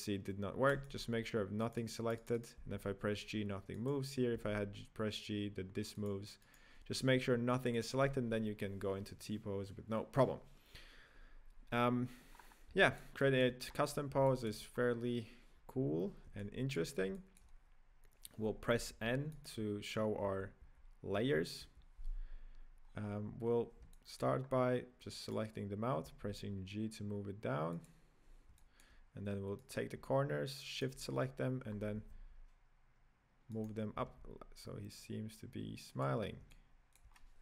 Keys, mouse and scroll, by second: 0.9 right drag, 1.6 right click, 1.7 right click, 1.9 right click, 2.1 right click, 2.3 right click, 2.5 g, 4.0 right click, 4.6 g, 6.6 right click, 7.6 click, 8.0 click, 12.3 scroll up 4, 12.8-13.6 shift+middle drag, 13.6-14.2 scroll up 3, 14.2-14.7 shift+middle drag, 14.7-15.5 scroll up 3, 15.5 n, 16.3-16.6 shift+middle drag, 17.1 middle click, 17.3-18.7 middle drag, 18.7 b, 20.2 n, 20.6 n, 21.1 n, 21.6 n, 22.3-22.8 scroll down 1, 22.8-23.9 scroll down 1, 23.9 shift+middle click, 24.4-25.2 scroll up 1, 25.5 right click, 26.0 g, 28.5-29.9 shift+middle drag, 29.9 right click, 31.0 shift+right click, 31.6 middle click, 31.6 scroll up 2, 31.9 g, 33.9 g, 36.4-37.4 middle drag.